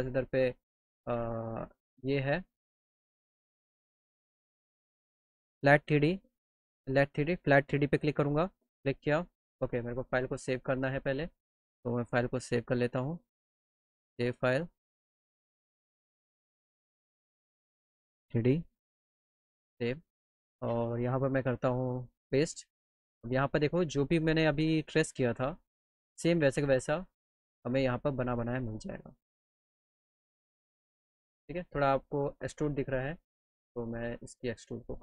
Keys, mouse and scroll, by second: 3.1 click, 8.2 click, 9.4 click, 9.7 click, 10.8 click, 11.9 click, 13.6 click, 16.6 click, 17.4 click, 19.3 click, 21.8 click, 27.0 click, 27.9 middle click, 28.2 alt+middle click, 29.5-31.0 alt+middle drag, 32.4 click, 33.9-35.0 drag.